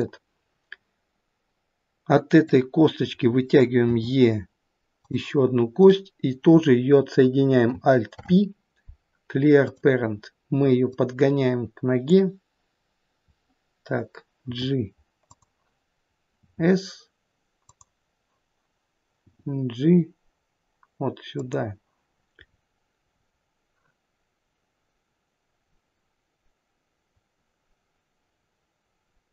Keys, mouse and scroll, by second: 0.6-1.5 scroll down 4, 2.3 click, 4.0 e, 5.9 click, 8.2 alt+p, 10.9 click, 14.5 g, 16.5 s, 19.3 g, 22.4-23.1 scroll up 4, 23.1-25.6 scroll down 1, 29.0-29.3 scroll down 1.